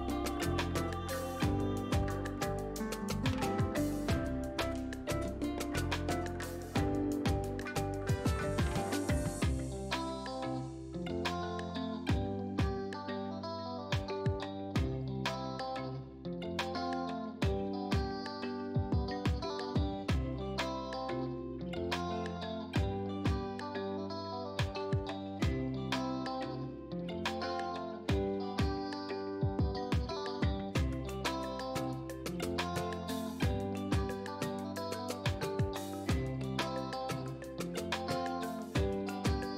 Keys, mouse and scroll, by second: 10.7 ctrl+z, 13.8 space, 13.9 click, 14.3 space, 20.2 F7, 20.2 right click, 21.9 click, 27.0 click, 29.6-35.6 shift+drag, 36.0 click.